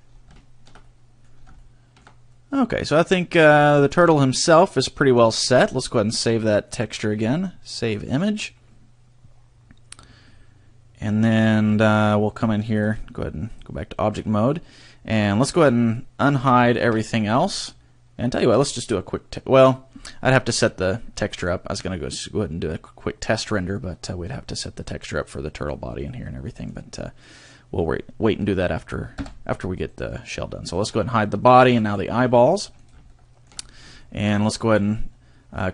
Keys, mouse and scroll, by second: 0.0-0.4 scroll down 3, 0.4 shift+middle click, 0.8 middle click, 1.3 scroll down 2, 1.6 shift+middle click, 2.3 middle click, 3.5 scroll down 2, 3.8 shift+middle click, 4.1 middle click, 5.4 middle click, 5.4 shift+middle click, 6.6 click, 9.2 click, 11.8 shift+middle click, 12.7 click, 14.0 middle click, 16.8 alt+h, 17.6 a, 21.4 right click, 23.0-24.5 scroll up 1, 25.6 middle click, 26.6 middle click, 29.2 h, 30.0 right click, 30.7 shift+right click, 31.7 h, 32.2 middle click, 32.8 right click, 33.1 shift+middle click, 33.6 scroll up 2, 34.0 shift+middle click.